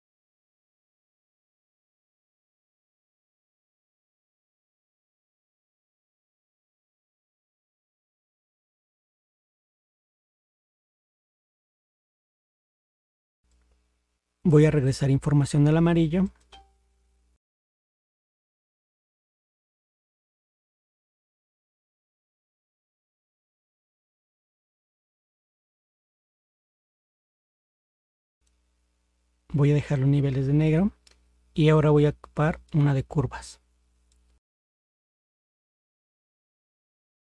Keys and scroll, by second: 0.6 ctrl++, 17.9 ctrl++, 21.6 ctrl++.